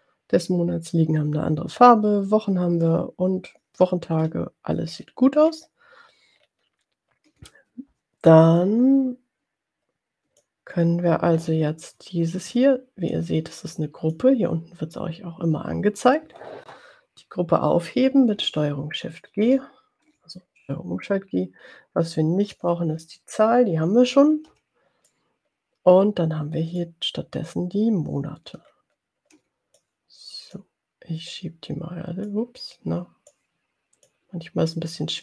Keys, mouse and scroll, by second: 5.0-5.8 ctrl+scroll down 2, 6.5 ctrl+scroll down 2, 8.6-10.7 drag, 13.2-14.7 drag, 19.8 ctrl+shift+g, 20.8 click, 22.9 click, 24.5 Delete, 25.1-27.1 drag, 28.7-29.3 ctrl+scroll down 2, 29.8 click, 31.4-32.5 drag, 33.4 click.